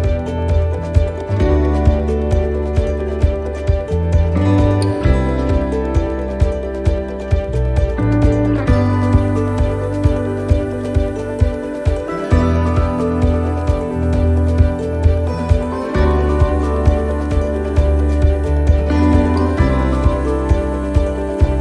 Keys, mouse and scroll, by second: 0.0 click, 2.5 click, 4.8 middle click, 6.0 l, 7.6 shift+d, 9.2 middle click, 10.1 click, 13.1 click, 15.7 middle click, 16.1 scroll down 2, 16.7 scroll down 1, 17.6 shift+middle click, 18.7 shift+d, 20.0 click.